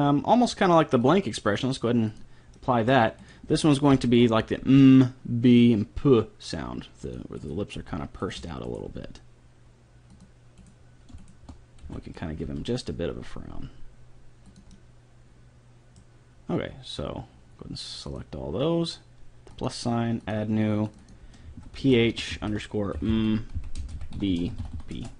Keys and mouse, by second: 2.5 middle click, 2.5-4.7 right drag, 3.9 KP_3, 4.6 g, 4.7 right click, 7.4-10.3 right drag, 7.8 g, 8.9 g, 10.7-13.1 right drag, 11.9 b, 12.5 g, 14.7 middle click, 18.1-19.7 drag, 20.0-22.9 drag, 23.1 m, 24.3 e, 24.7 e.